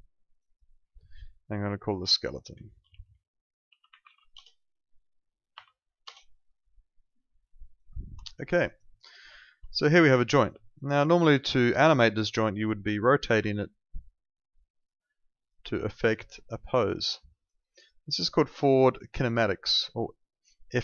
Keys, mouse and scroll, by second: 2.3-5.5 typing, 6.0 Return, 7.6 click, 8.3 alt+middle click, 8.5 alt+right click, 8.8 alt+click, 9.0 alt+right click, 9.3 alt+middle click, 9.7 click, 10.0 alt+click, 10.6 alt+middle click, 10.8 alt+right click, 11.0 alt+click, 12.6 click, 13.2 e, 14.3 click.